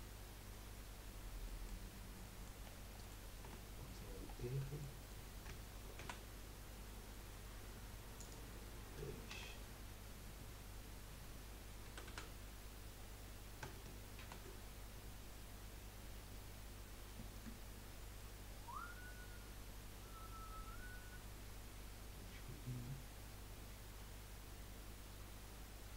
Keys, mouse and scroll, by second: 1.4-1.9 middle drag, 1.9-2.2 scroll up 1, 2.2-3.4 middle drag, 3.4 Tab, 4.3-4.6 scroll down 1, 4.6-6.0 middle drag, 6.0 ctrl+r, 9.3 2, 9.9 scroll up 1, 11.9 a, 12.1 a, 14.2 ctrl+r.